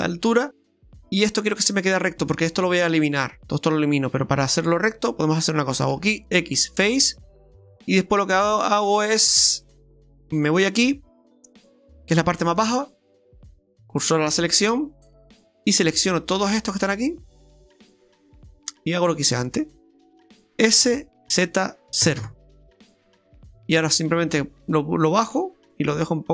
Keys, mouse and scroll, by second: 0.1 middle click, 5.9 x, 7.1 middle click, 8.4 middle click, 9.6 click, 10.6 right click, 12.6 shift+s, 15.6 shift+right click, 16.1 shift+right click, 17.7 shift+right click, 18.4 shift+right click, 18.8 shift+right click, 19.0 shift+right click, 20.7 shift+right click, 20.7 s, 24.5 click.